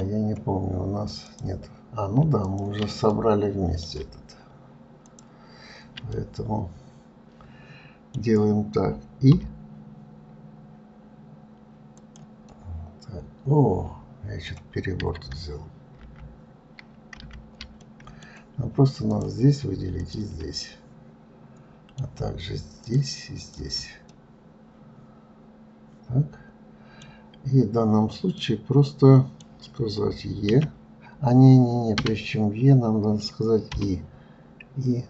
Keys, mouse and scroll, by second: 1.4 click, 2.7 ctrl+click, 3.4-5.3 middle drag, 5.3 ctrl+click, 6.4-9.3 middle drag, 12.7-15.8 middle drag, 16.3 ctrl+z, 17.4 ctrl+z, 18.1-19.3 middle drag, 19.3 click, 20.2 shift+click, 20.9-23.1 middle drag, 23.1 shift+click, 23.7 shift+click, 24.3-27.3 middle drag, 28.6-30.8 middle drag, 30.8 e.